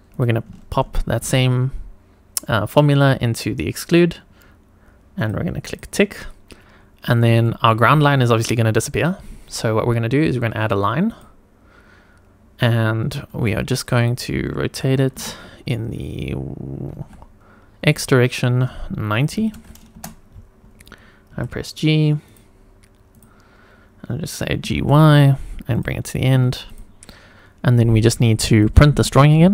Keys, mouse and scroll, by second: 0.1-5.2 drag, 5.6 click, 6.5 scroll up 1, 7.0 click, 7.4 shift+middle drag, 11.1 click, 13.3 g, 13.9 click, 15.2 r, 16.9 y, 17.8 x, 19.3 KP_9, 19.9 Return, 19.9 KP_0, 21.2 g, 22.2 click, 23.1 click, 23.5 scroll down 2, 24.6 g, 24.8 y, 25.7 click, 26.3 Tab, 26.7 click, 28.5 click.